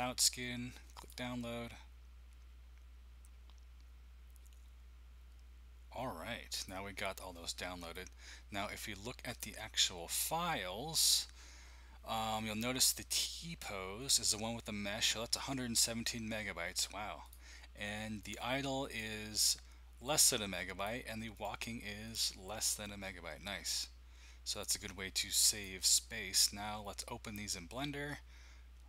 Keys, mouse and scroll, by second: 1.0 click, 7.8 click, 9.6-13.1 drag, 14.0-18.2 drag, 18.9-21.4 drag, 22.2-24.0 drag, 24.5-25.5 drag, 25.6-28.8 drag.